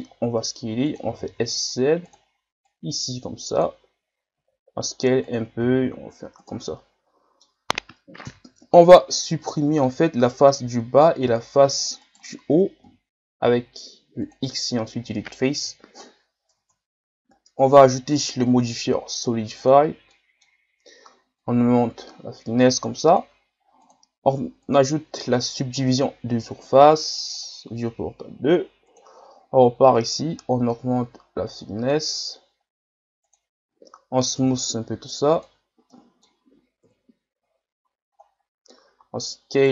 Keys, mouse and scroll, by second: 1.1 s, 2.7-4.4 drag, 4.4 s, 5.6 s, 6.7-7.8 middle drag, 7.8 scroll up 3, 8.5 ctrl+Tab, 9.4 middle click, 10.2 right click, 10.5-12.1 middle drag, 12.1 shift+right click, 12.8 x, 15.7 KP_1, 16.6 Tab, 19.7-20.1 drag, 20.1-21.4 middle drag, 21.4-24.6 drag, 26.0-34.4 drag, 34.4 w, 35.9-36.9 middle drag, 36.9 KP_1, 37.5-38.1 scroll down 6, 38.1 scroll up 5, 38.8 s.